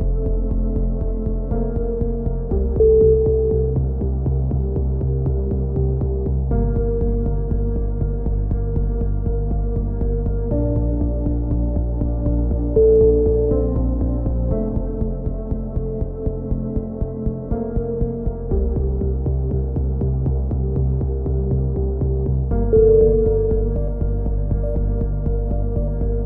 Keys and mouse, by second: 0.3-1.3 drag, 0.5 a, 0.9 z, 2.1 z, 2.5-3.5 drag, 3.5 right click, 3.5 KP_3, 3.9 click, 4.9 a, 5.0 z, 5.3 click, 7.5 right click, 7.8 click, 8.3 ctrl+z, 8.7 right click, 9.4 KP_3, 9.8 click, 12.2 click, 12.7 right click, 13.0 KP_3, 13.4-15.4 drag, 15.0 a, 15.4 ctrl+z, 15.8 ctrl+z, 16.8 right click, 16.8 z, 17.3 click, 19.4 a, 19.5 z, 19.7 click, 21.9 KP_7, 22.1 click, 22.8 n, 23.2-24.4 drag, 25.3 n, 25.5 click.